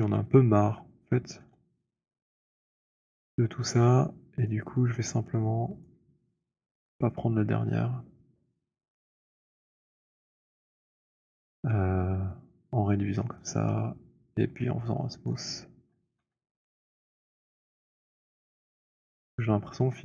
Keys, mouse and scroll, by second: 0.2 z, 1.6 z, 3.9 click, 4.9 alt+middle click, 5.9 right click, 11.0 shift+right click, 12.3 <, 15.3 shift+right click, 16.2 w, 17.9 right click, 18.4 click, 19.0-19.7 scroll.